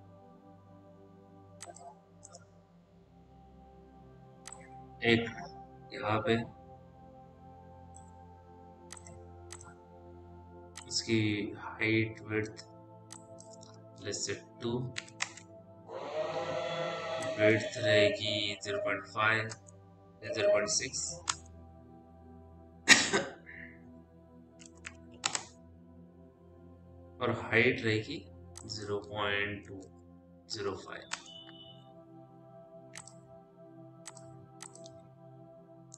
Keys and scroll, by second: 4.2 w, 15.1 Return, 18.9 5, 19.3 Return, 19.9 KP_0, 20.6 KP_6, 21.0 Return, 24.7 5, 25.1 Return, 30.0 KP_0, 30.4 KP_Decimal, 30.8 KP_5, 30.9 Return, 32.9 Return.